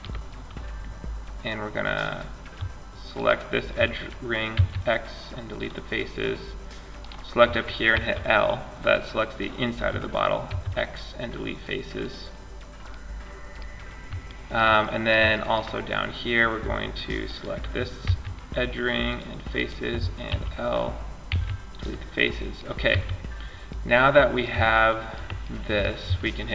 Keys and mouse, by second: 2.3 click, 2.3-3.7 right drag, 3.7 x, 7.1 l, 9.7 x, 16.4-19.5 drag, 17.2 x, 19.5 l, 20.5 x, 22.1 a, 26.0 ctrl+s.